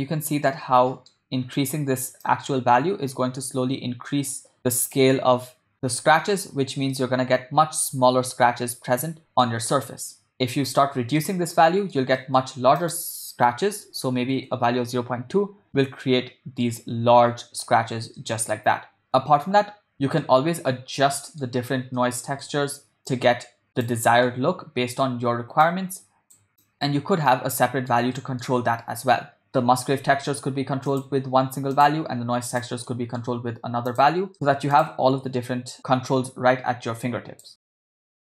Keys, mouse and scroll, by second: 0.6-1.3 ctrl+middle drag, 2.7-5.4 drag, 5.7-6.6 shift+middle drag, 7.2-8.3 ctrl+middle drag, 9.7-10.3 ctrl+middle drag, 10.9 ctrl+middle click, 11.6 middle click, 12.2 ctrl+middle click, 12.8-14.5 drag, 16.3-16.9 middle drag, 18.3 shift+middle click, 20.2-21.5 middle drag, 22.0 middle click, 23.0-24.0 drag, 24.4 middle click, 25.7 click, 26.6 click, 27.4 middle click, 28.2 ctrl+middle click, 31.0 click, 31.8 click, 32.5 click, 32.9 middle click, 33.9 click, 34.6 ctrl+middle click, 34.8 click, 35.8-37.5 drag, 35.8 shift+d, 37.6 click, 37.9 click, 38.1 0, 38.2 click.